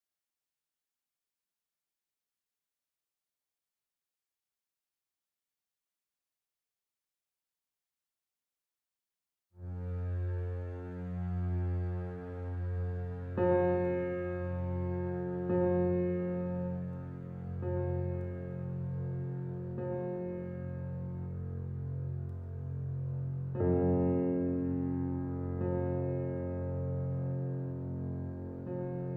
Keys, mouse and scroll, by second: 0.9 click, 4.5 right click, 5.4 click, 8.8 scroll down 1, 9.9 scroll up 1, 20.6 shift+scroll down 1, 21.9-22.3 shift+scroll up 1, 24.1 right click, 27.7 right click.